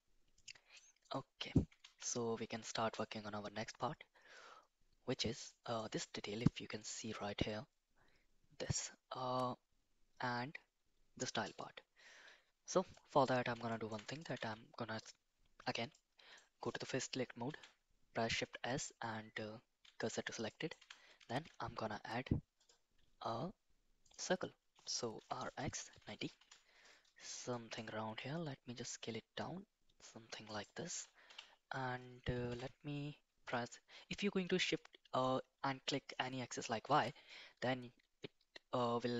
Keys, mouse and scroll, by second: 1.1 middle click, 1.8 Tab, 2.6 middle click, 3.8-5.2 middle drag, 5.5 middle click, 12.9-13.2 middle drag, 13.7 shift+middle drag, 14.1 click, 14.4 Tab, 15.9 middle click, 17.4 shift+s, 20.5 middle click, 20.8 Tab, 21.3 shift+a, 25.2 r, 27.5 middle click, 28.0 s, 31.2 KP_1, 32.5 g.